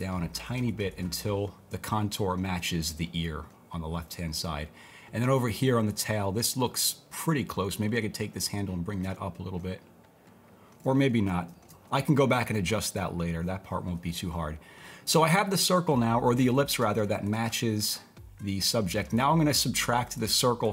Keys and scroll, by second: 11.5 super+z.